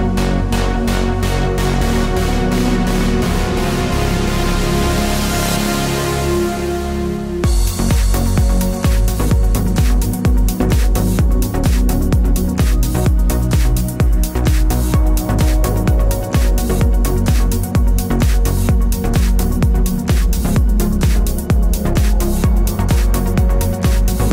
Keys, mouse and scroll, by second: 1.2 ctrl+KP_Add, 2.3 g, 3.4 click, 5.0-6.2 middle drag, 5.0 a, 6.2-8.2 drag, 6.9 g, 8.5-9.7 drag, 9.2 z, 10.4 g, 11.3 click, 11.8 g, 12.4-13.9 middle drag, 13.6 g, 13.9 click, 14.0 middle click, 14.8 click, 15.5 middle click, 15.8 Tab, 16.0 click, 16.6 g, 18.2 Tab, 18.6 click, 19.6 g, 20.8 click, 21.1 g, 22.0 click, 22.2 middle click, 22.9 click, 23.5-24.3 drag, 23.9 g.